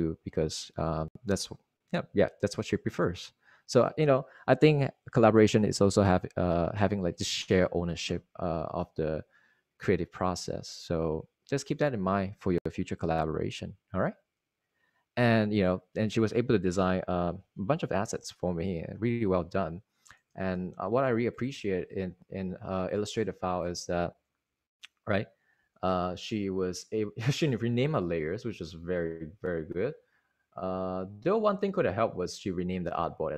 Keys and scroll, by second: 14.8 Right, 21.1 super+Tab, 22.6 super+Tab, 23.6-24.5 typing, 25.1 super+y, 26.2 super+y.